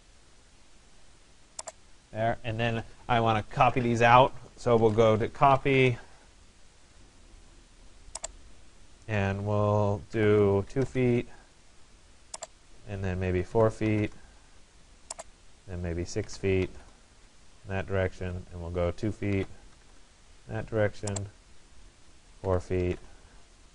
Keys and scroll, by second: 5.3 Return, 9.8 2, 10.8 Return, 13.6 4, 14.0 Return, 16.3 6, 16.8 Return, 19.4 2, 19.9 Return.